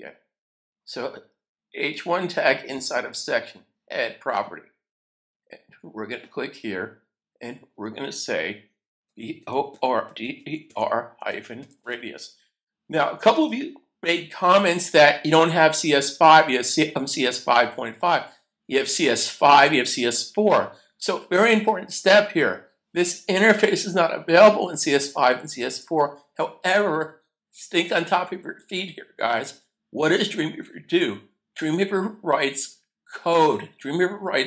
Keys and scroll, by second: 8.8-12.3 typing, 13.3 Return.